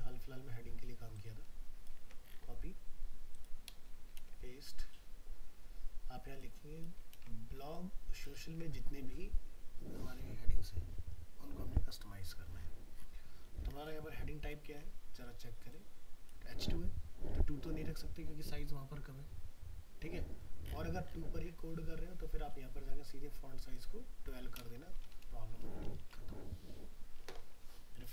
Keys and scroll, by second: 2.0 ctrl+c, 4.2 ctrl+v, 7.1 ctrl+c, 8.5 ctrl+v, 25.6 ctrl+s.